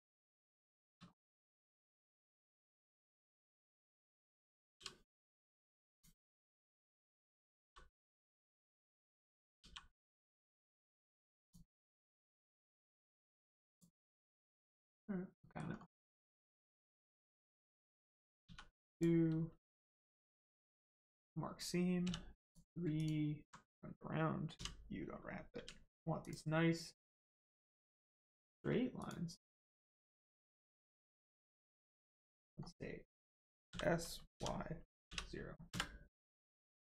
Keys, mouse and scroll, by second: 0.6 shift+middle click, 1.0 scroll up 1, 1.8 shift+click, 2.6-4.2 scroll up 1, 4.2-5.1 scroll down 1, 5.1-5.9 scroll up 1, 5.9 click, 7.6 g, 8.0 middle click, 8.7 ctrl+click, 9.6 g, 10.4 middle click, 11.4 ctrl+click, 12.5 click, 13.7 click, 14.2-14.8 scroll up 1, 14.8 middle click, 15.7-16.6 scroll down 1, 16.6 middle click, 18.4 2, 18.9 click, 19.6 right click, 20.8 click, 23.0 alt+click, 24.5 u, 26.2 click, 27.7 middle click, 28.4 shift+middle click, 28.9 click, 29.0 click, 29.7-30.4 scroll up 1, 30.4 middle click, 32.5-33.6 scroll down 1, 33.7 s, 34.3 y, 35.7 Return.